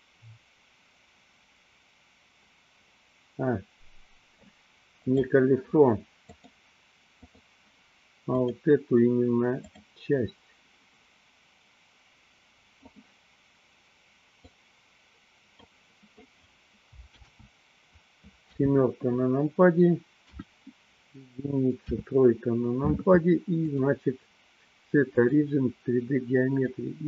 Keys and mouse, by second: 5.0 click, 6.4-7.5 drag, 12.9 click, 14.4-15.9 drag, 17.3 ctrl+z, 18.6 KP_7, 20.4 KP_1, 21.9 KP_3, 23.6-25.4 drag, 26.6-27.0 drag.